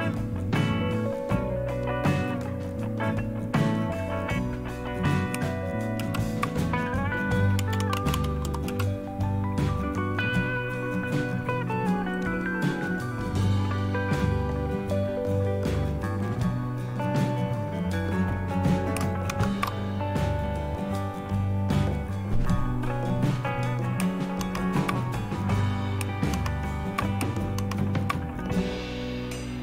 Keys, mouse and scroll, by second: 0.0 click, 2.2 click, 5.9 super+Return, 7.3-8.6 typing, 12.1 click, 16.2 click, 19.2 shift+super+Left, 24.3 super+Right, 26.3 super+Right, 27.5 super+Right.